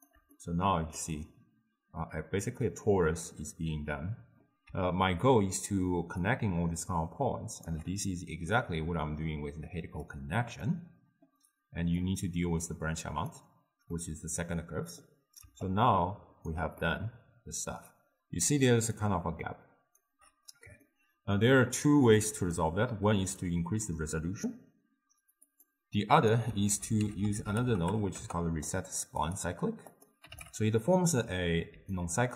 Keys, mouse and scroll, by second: 1.0-4.2 middle drag, 6.3-10.1 drag, 15.7 right click, 16.5 d, 16.9-19.0 middle drag, 19.0-28.3 drag, 28.3 ctrl+a, 30.5-32.0 drag, 32.0-32.3 right drag.